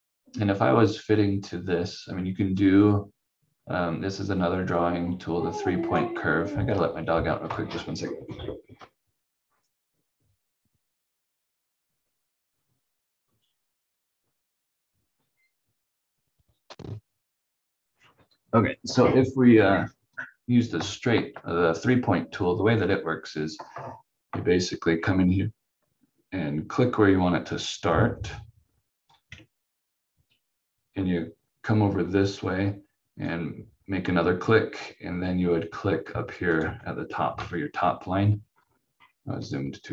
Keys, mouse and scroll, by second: 2.5 click, 24.5-27.0 scroll up 1, 29.1 click, 36.4 ctrl+click, 37.3 F4, 38.4 scroll up 1.